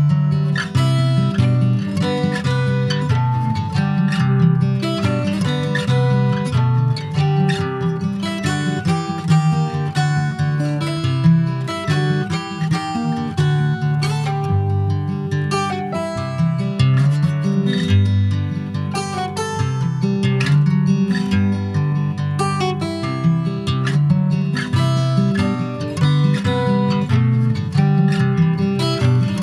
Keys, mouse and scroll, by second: 0.9 middle click, 4.9 middle click, 7.5 Tab, 8.6 click, 9.1-12.5 middle drag, 13.5 click, 14.6 g, 15.1 y, 16.8 x, 19.0 click, 20.0-21.7 middle drag.